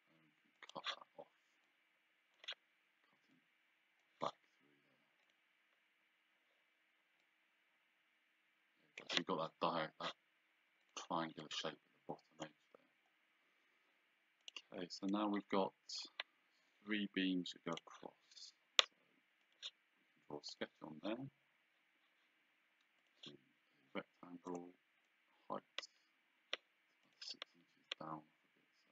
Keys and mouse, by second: 0.6 click, 1.7 click, 3.4 click, 5.3 click, 7.3 click, 10.9 click, 14.5 click, 17.8 click, 19.5 click, 20.6 click, 23.1 click, 24.6 click, 27.1 click.